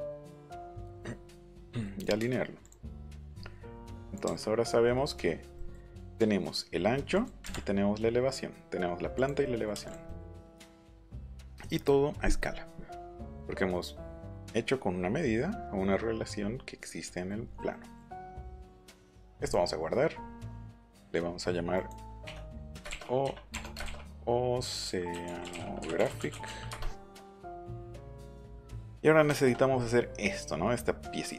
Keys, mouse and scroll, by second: 0.4 click, 1.4 click, 1.7 middle click, 2.0 click, 2.0 middle click, 2.6 click, 4.0 click, 4.2 Up, 4.6 click, 7.1 click, 9.2 click, 9.9 click, 10.3 middle click, 18.7 click, 19.4 click, 22.2 Caps_Lock, 23.2 Caps_Lock, 23.5 BackSpace, 24.6-26.4 typing, 26.7 Return, 28.4 middle click, 28.8 middle click, 29.2 shift+middle click, 30.6 scroll up 2, 31.0-31.3 scroll down 2.